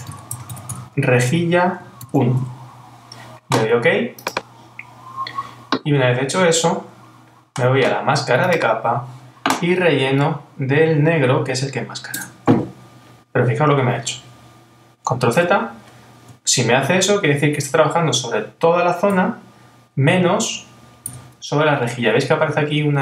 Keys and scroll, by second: 2.0 shift+_, 15.4 super+z, 16.6 super+-.